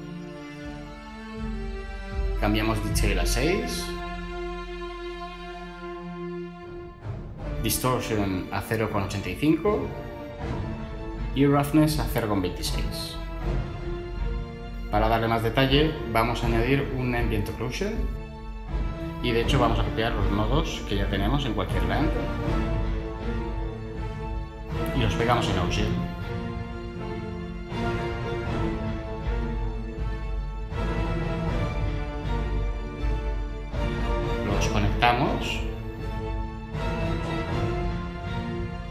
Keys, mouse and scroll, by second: 4.6 6, 4.8 Return, 9.7 typing, 10.0 Return, 12.1-12.5 typing, 12.6 Return, 16.6 ctrl+shift+a, 17.1 Return, 23.5 ctrl+c, 25.8 ctrl+v.